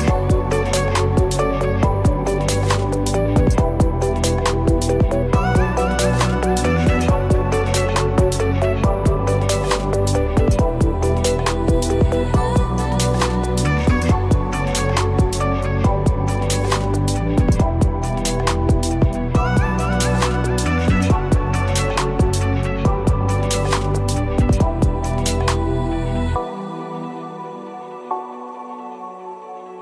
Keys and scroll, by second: 3.8 ctrl+z, 5.3 ctrl+t, 21.2 ctrl+Return, 24.5 ctrl+-.